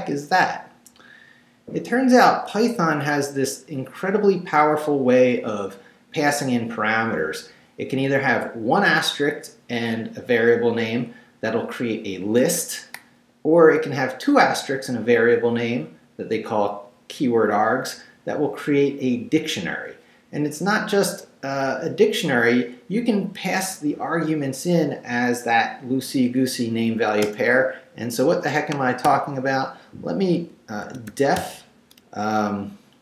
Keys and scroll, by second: 27.3 Return, 29.0 q, 30.6-31.9 typing.